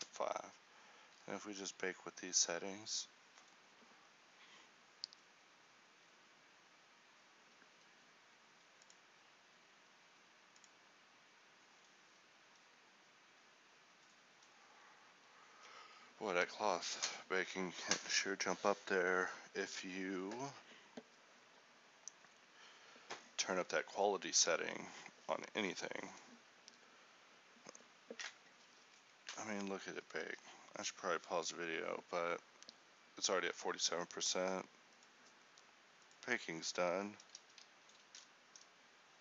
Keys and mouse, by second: 36.1 ctrl+l, 36.1 ctrl+r, 37.3 alt+a.